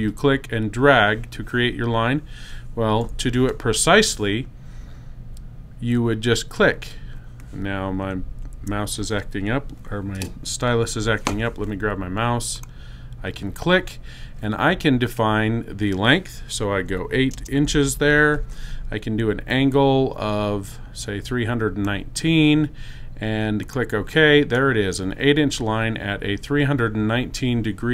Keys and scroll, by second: 2.5 BackSpace.